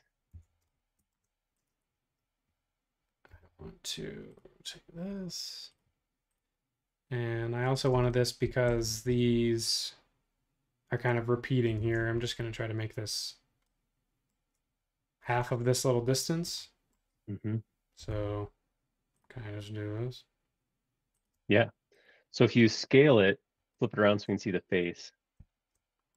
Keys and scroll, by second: 0.3 BackSpace, 3.4 m, 7.9 space, 8.9 super+Tab, 11.8 super+Tab, 18.0 s, 21.3 space.